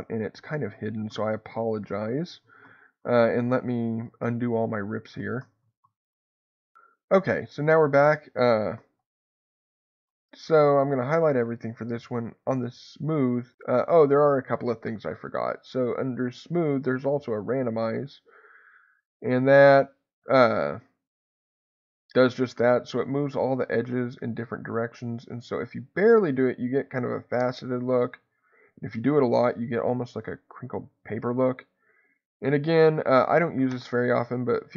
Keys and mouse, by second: 0.3-2.4 ctrl+z, 3.3 ctrl+z, 4.2 ctrl+z, 5.6 ctrl+z, 9.0 a, 11.1-16.9 drag, 18.2-22.3 drag, 22.0 Escape, 23.0-34.0 drag, 33.7 Escape.